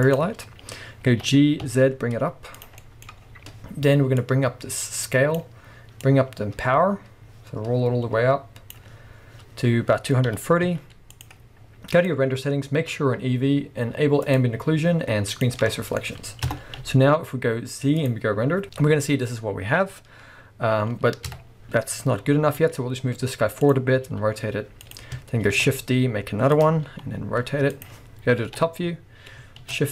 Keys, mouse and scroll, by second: 1.2 g, 2.6 click, 2.8-4.2 middle drag, 3.2-4.2 scroll down 2, 4.2-11.2 drag, 9.7-10.2 scroll up 2, 10.2 g, 11.9 click, 14.3 click, 15.3 click, 15.7-23.7 middle drag, 16.5 KP_0, 16.8 z, 18.6-20.3 scroll up 2, 20.3 scroll up 1, 20.4-21.3 scroll down 2, 21.3 KP_3, 22.4 g, 23.7 click, 24.0 r, 24.9 click, 25.5 shift+d, 26.6 click, 26.9 r, 27.9 click, 28.4 KP_7, 29.6 shift+d.